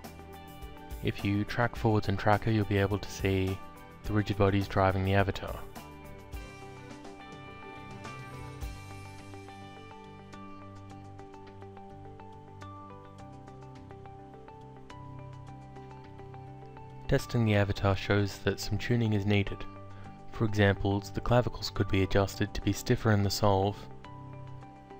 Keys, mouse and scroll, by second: 0.3 click, 2.4 click, 4.8 click, 6.1 click, 7.8 click, 11.2 click, 13.6 click, 15.5 alt+click, 20.9 alt+click.